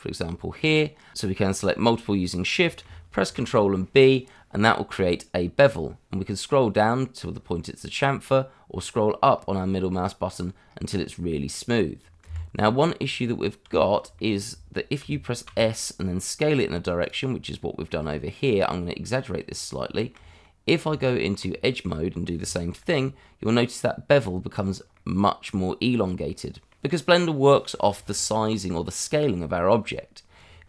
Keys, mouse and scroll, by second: 3.2 ctrl+b, 6.0-8.4 scroll down 1, 8.4-9.3 scroll up 1, 11.3-12.2 scroll down 1, 12.2 Escape, 12.6-13.0 scroll down 1, 13.0 Tab, 13.7 scroll down 1, 14.1 shift+middle click, 15.3 s, 15.4 z, 17.0 click, 17.3 scroll down 1, 17.9-19.8 scroll up 1, 19.9 shift+middle click, 20.4 middle click, 20.8 Tab, 22.0-22.4 scroll up 1, 22.8 ctrl+b, 24.6 click, 25.0 middle click, 27.9 ctrl+z, 28.7-29.2 scroll down 1, 29.2 Tab.